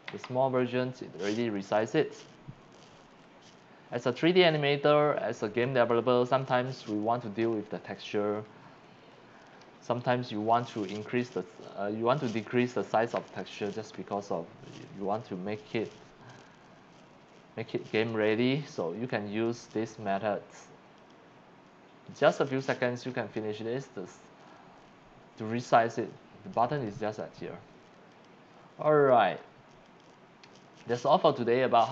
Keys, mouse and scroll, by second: 0.1 Left, 19.6 click, 21.0 click, 26.7 click, 28.1 click, 28.9 click, 29.8 click.